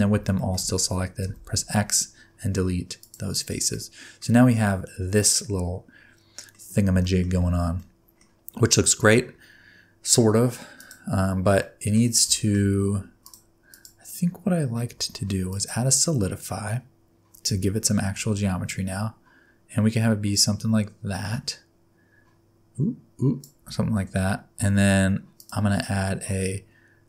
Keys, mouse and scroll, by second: 0.4 shift+middle click, 1.2 x, 3.7 middle click, 4.3-5.1 scroll down 3, 4.7 middle click, 6.6 scroll up 2, 7.0 shift+middle click, 7.8 middle click, 8.5 scroll up 1, 15.6 click, 17.4 click, 25.4 click.